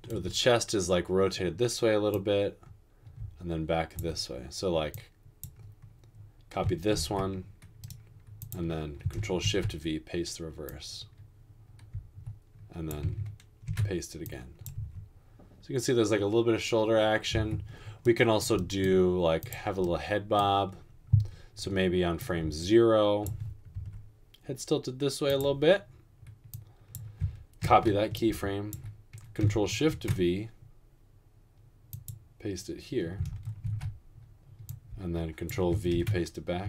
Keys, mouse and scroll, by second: 7.0 ctrl+c, 9.7 ctrl+shift+v, 13.8 ctrl+v, 14.8 space, 17.5 typing, 24.0 r, 27.7 ctrl+c, 29.9 ctrl+shift+v, 33.7 ctrl+shift+v, 36.2 ctrl+v.